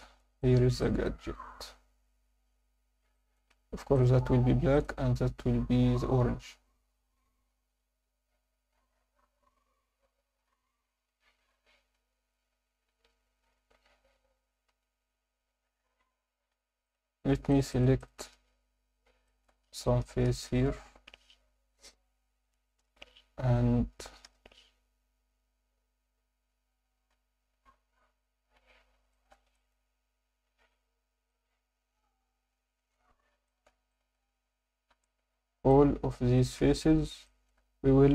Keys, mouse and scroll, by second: 0.4 alt+shift+middle drag, 0.8 ctrl+alt+middle click, 3.1 alt+shift+middle drag, 3.9 click, 4.7 click, 12.0 Tab, 13.6 Tab, 14.7 KP_7, 15.1-15.6 scroll down 1, 15.6 Tab, 16.6 1, 16.8 click, 17.5 shift+click, 17.7 shift+click, 18.0 shift+click, 19.3 alt+shift+middle click, 20.3 ctrl+KP_Add, 21.0 ctrl+KP_Add, 21.7 scroll up 1, 22.8 ctrl+KP_Add, 27.2 3, 28.7 scroll up 2, 29.1 alt+shift+middle click, 29.5 ctrl+alt+middle click, 30.6 c, 32.8 Escape, 33.1 scroll down 1, 33.5 alt+shift+middle click, 33.9 ctrl+alt+middle click, 34.9 c, 36.6 Escape, 36.7-37.1 scroll down 2, 37.3 alt+shift+middle click.